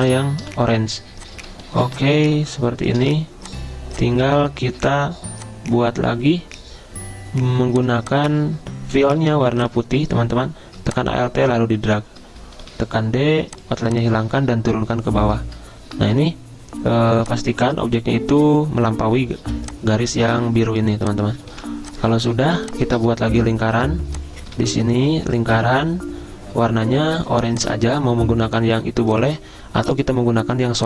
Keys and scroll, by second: 0.4 v, 1.9 r, 3.0 v, 4.7 ~, 9.2 r, 12.7 d, 15.0 ctrl+[, 16.1 ~, 19.4 z, 21.0 v, 22.6 i, 27.2 i.